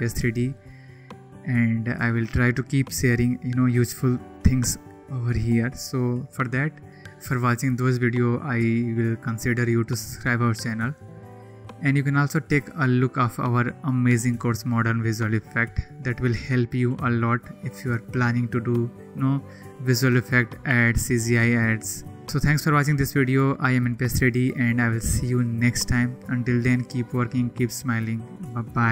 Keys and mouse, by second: 11.4 click.